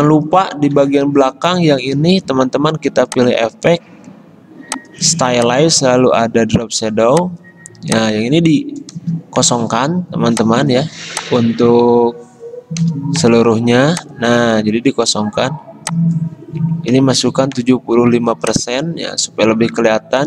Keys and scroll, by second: 0.6 ctrl+z, 9.1 0, 12.9 0, 17.0 typing.